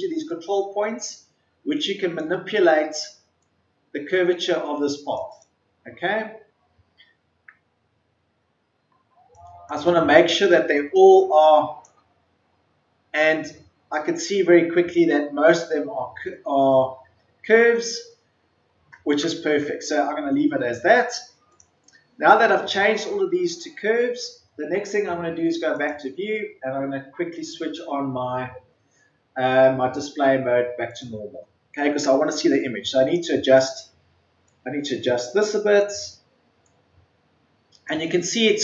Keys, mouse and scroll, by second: 5.7-6.4 scroll down 1, 6.4-7.6 scroll up 1, 7.7-8.0 ctrl+scroll down 1, 8.6-9.0 ctrl+scroll down 1, 9.2 click, 11.0 click, 12.4 ctrl+scroll up 1, 13.5-13.9 ctrl+scroll down 1, 16.6-17.2 ctrl+scroll up 1, 18.0-18.4 scroll up 1, 19.2-19.9 ctrl+scroll down 1, 20.5 ctrl+scroll up 1, 20.6-21.4 scroll down 1, 21.4-31.9 drag, 32.3-33.2 ctrl+scroll up 1, 33.2-37.9 drag.